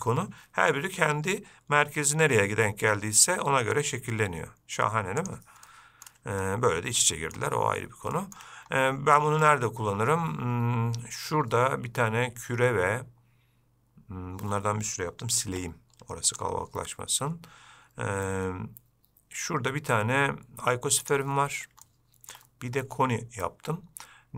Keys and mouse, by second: 5.9-6.3 middle drag, 7.3 middle drag, 8.4 shift+middle drag, 15.7 x, 21.3 click, 22.1-22.6 shift+middle drag.